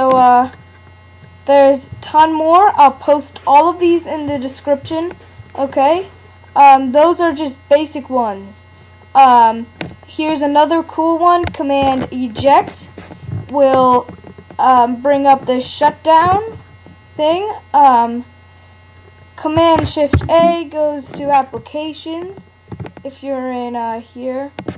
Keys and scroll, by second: 20.1 shift+super+a.